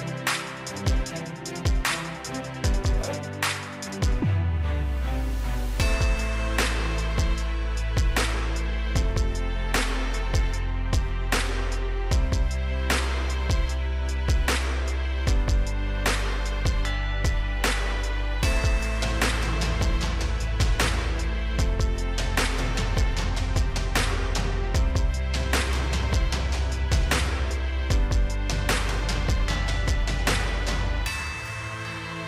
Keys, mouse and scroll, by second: 0.2-18.6 drag, 21.2 right click, 21.7 click, 24.3-24.6 scroll down 1, 28.0-29.8 scroll up 1, 30.6 click, 30.8-31.2 scroll up 1, 31.2 scroll down 1.